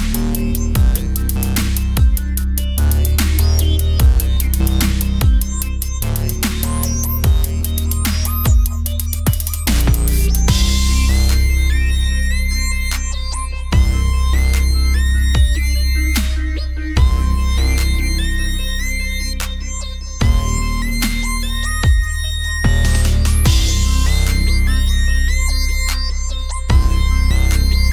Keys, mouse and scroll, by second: 1.4 KP_1, 3.4 s, 4.9 o, 5.1 click, 5.4 s, 6.4 o, 6.7 s, 8.0 click, 9.5 click, 10.4 middle click, 11.7 middle click, 12.5 middle click, 13.1 click, 14.0-16.3 drag, 16.1 a, 16.3 click, 17.0 alt+m, 17.9 click, 18.4 o, 18.7 click, 19.3 right click, 19.8 ctrl+z, 19.8 click, 20.4 alt+m, 21.0-22.2 drag, 22.0 o, 22.4 click, 23.7 middle click, 24.4 g, 27.4 middle click.